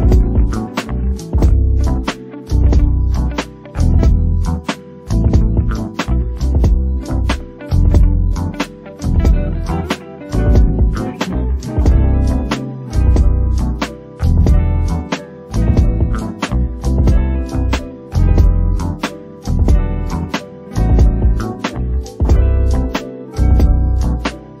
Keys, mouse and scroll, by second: 0.2 o, 1.7 click, 1.8 g, 2.2 click, 2.3 g, 2.9 click, 3.0 g, 3.5 click, 3.5 g, 4.3-4.6 scroll up 5, 4.6 click, 4.8 g, 5.6 click, 5.7 g, 6.7 scroll down 1, 6.9 click, 7.1 click, 8.4 click, 9.3-9.7 scroll up 3, 9.7 click, 10.2 middle click, 10.6 KP_1, 10.8-11.2 scroll down 12, 11.2 shift+middle click, 11.3-12.6 scroll up 8, 11.7 shift+middle click, 12.1 shift+middle click, 12.6 click, 13.4 o, 14.0 click, 16.4-17.0 scroll down 11, 17.0 middle click, 17.4 KP_1, 17.6 scroll down 1, 17.7 shift+middle click, 17.9-18.2 scroll up 5, 18.2 click, 18.5 click, 19.3-19.8 scroll down 9, 19.8 scroll up 7, 20.0 shift+middle click, 20.3 click, 20.4 click, 21.4 KP_3, 21.7-22.0 scroll up 2, 22.0 click, 23.4 click, 23.6 click, 24.3 click.